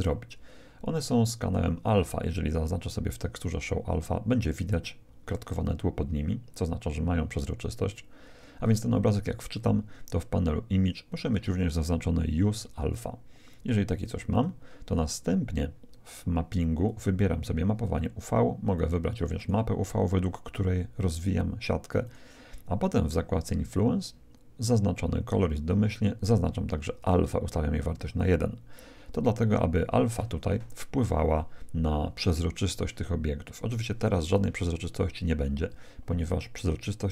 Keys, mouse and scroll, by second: 0.0-1.7 drag, 3.4-5.1 drag, 9.1-11.3 middle drag, 14.3-16.2 drag, 15.8-18.4 middle drag, 16.9-18.6 drag, 18.7-20.5 drag, 22.0-23.7 drag, 27.0-28.7 drag.